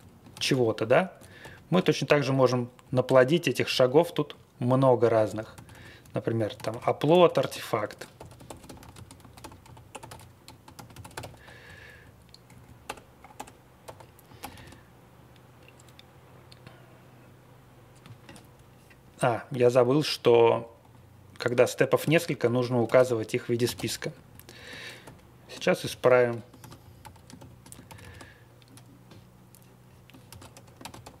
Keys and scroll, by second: 0.3 ctrl+x, 0.5 o, 1.4 ctrl+alt+u, 2.0 c, 2.8 Left, 3.0 Return, 3.7 Down, 4.3 Right, 4.6 Right, 4.6 Right, 4.7 Right, 5.0 Left, 5.1 Left, 5.3 Left, 5.5 alt+d, 5.7 alt+d, 6.5 ctrl+d, 6.7 ctrl+d, 7.6-11.6 typing, 12.8-14.3 typing, 14.3 ctrl+c, 14.5 ctrl+c, 20.8 a, 22.0 ctrl+x, 22.8 ctrl+x, 22.9 o, 23.7 o, 24.1 Up, 24.3 Up, 24.5 Up, 25.0 ctrl+alt+u, 25.8 m, 26.0 shift+9, 26.6 ctrl+d, 26.8 Left, 27.3 shift+., 27.8 ctrl+c, 28.0 ctrl+c, 30.3 ctrl+x, 30.8 ctrl+x.